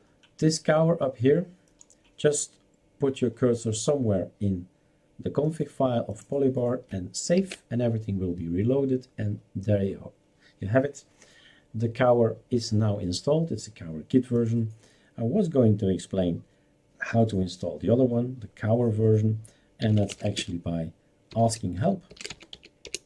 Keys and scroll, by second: 7.4 ctrl+s, 19.7-23.0 typing.